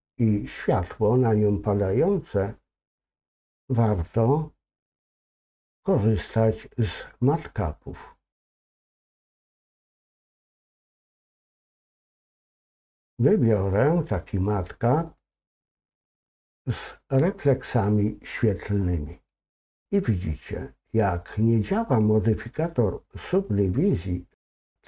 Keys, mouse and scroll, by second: 8.3-15.9 drag.